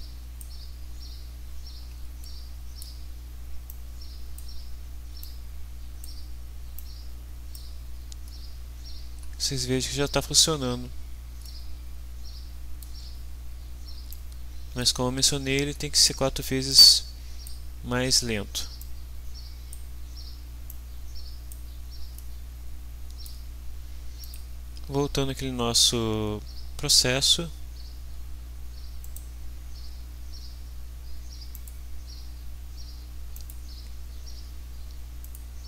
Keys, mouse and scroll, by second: 2.2 middle click, 3.7-4.5 drag, 5.2-6.2 drag, 6.7-7.7 drag, 11.4-13.0 middle drag, 14.1-15.0 drag, 16.7 click, 18.8 click, 20.8-21.7 drag, 22.1-23.4 middle drag, 24.2 click, 29.0 right click, 31.5 click, 33.3 click, 35.2 click.